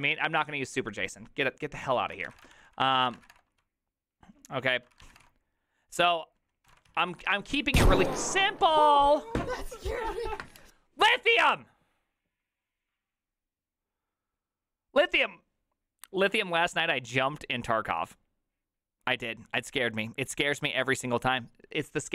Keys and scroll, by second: 2.0-7.8 typing, 3.1 ctrl+c, 3.2 ctrl+:, 3.3 Return.